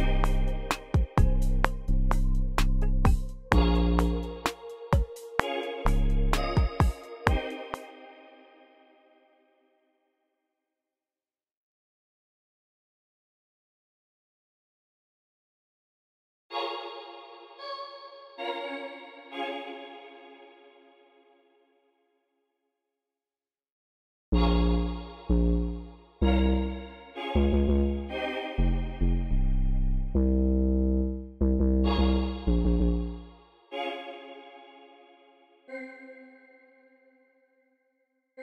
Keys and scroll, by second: 7.2 space, 7.9 super+z, 8.2 t, 9.0 t, 9.9 t, 10.5 alt+super+l, 13.0-17.2 typing, 19.7 space, 20.8 typing, 23.0 s, 24.2 space, 33.5 space.